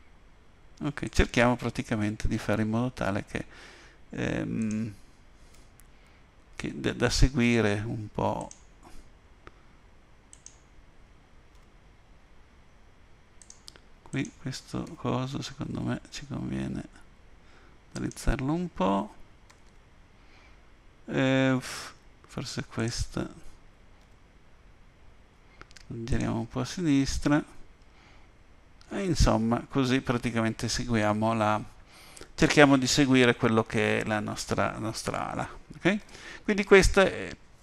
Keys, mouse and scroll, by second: 2.3-3.3 scroll up 2, 4.6 click, 5.5 g, 10.3 click, 11.5 g, 14.1 click, 14.8 g, 19.5 a, 19.6 a, 22.8 click, 24.0 g, 27.6-28.0 scroll up 1, 28.0 scroll down 1, 30.5-30.8 scroll up 2, 30.9-31.4 scroll down 3, 36.0 Tab.